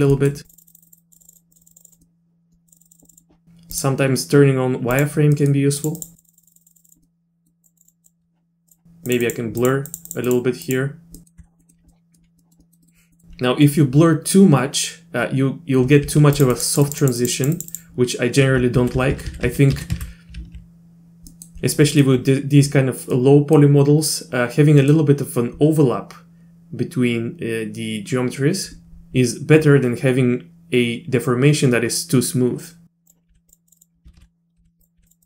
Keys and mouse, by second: 0.1 middle click, 0.4 click, 0.5 click, 0.6 click, 0.8 click, 0.9 click, 1.0 click, 1.2 click, 1.2 click, 1.3 click, 1.5 click, 1.6 click, 1.7 click, 1.8 click, 1.9 click, 2.0 middle click, 2.7 click, 2.8 click, 2.9 click, 2.9 click, 3.0 click, 3.1 click, 3.9-5.3 drag, 5.3 middle click, 5.8 click, 6.0 click, 6.2 click, 6.3 click, 6.4 click, 6.5 click, 6.6 click, 6.7 click, 6.8 click, 6.9 click, 7.0 middle click, 7.6 click, 7.8 click, 7.9 click, 8.0 click, 9.1 click, 9.2 click, 9.6 click, 9.9 click, 10.1 click, 10.2 click, 10.6 click, 11.2 middle click, 11.4 z, 11.6 middle click, 11.9 middle click, 12.4 click, 12.4 middle click, 12.6 click, 12.8 middle click, 13.1 middle click, 16.0 f, 16.5 click, 16.9 click, 17.0 click, 17.2 click, 17.4 click, 17.6 click, 17.7 click, 18.8 ctrl+z, 19.0-19.5 ctrl+z, 19.7 ctrl+z, 19.9 ctrl+z, 21.3 click, 21.9 click, 23.2 click, 23.6 middle click, 24.8 middle click, 33.1 click, 33.3 f, 33.7 click, 33.8 click, 34.1 ctrl+z, 34.2 ctrl+z, 34.6 f, 35.0 f, 35.2 click.